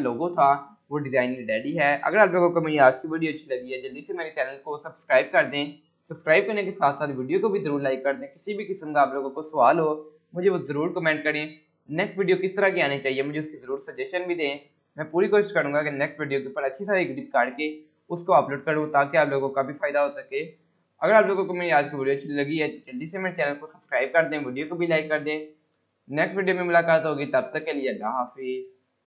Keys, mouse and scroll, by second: 22.0 click, 26.1 click.